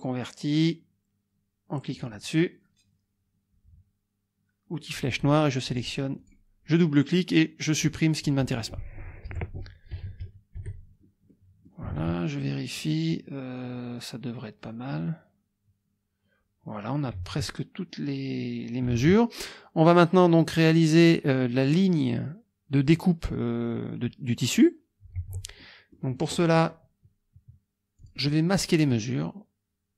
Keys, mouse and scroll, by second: 2.0 click, 4.8 click, 5.7 click, 6.2 click, 7.8 click, 9.3 Delete, 10.2 KP_Subtract, 11.3 click, 12.0 alt+Tab, 17.2 alt+Tab, 18.9 alt+Tab, 25.2 alt+Tab, 25.6 alt+click, 28.0 click, 28.8 click.